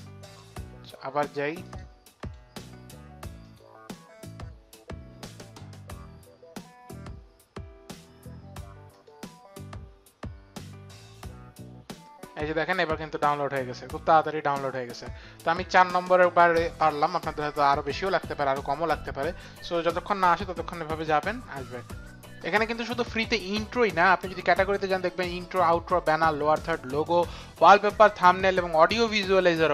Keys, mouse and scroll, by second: 0.8 click, 1.6 right click, 2.2 click, 3.4 click, 8.9 click.